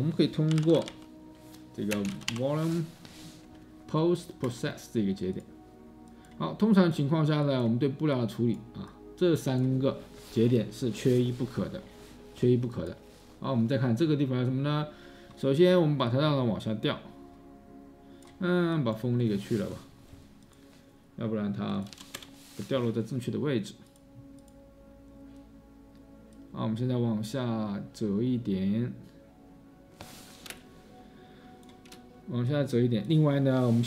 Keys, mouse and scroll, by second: 0.4-2.9 typing, 21.9-22.2 typing.